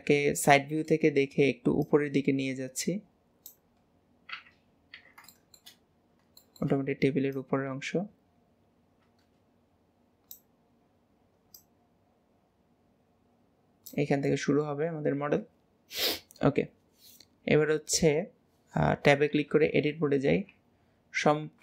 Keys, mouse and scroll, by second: 0.6-1.9 shift+middle drag, 1.9 click, 3.9-4.2 scroll up 5, 4.4 Tab, 4.9 Tab, 5.3 shift+middle drag, 5.8-6.4 scroll up 2, 6.4-7.4 shift+middle drag, 7.4 click, 10.7-11.6 scroll down 1, 11.6 click, 14.3-14.9 middle drag, 14.9 alt+z, 15.2 scroll down 3, 15.7 scroll up 1, 15.8 scroll down 1, 20.3 KP_3.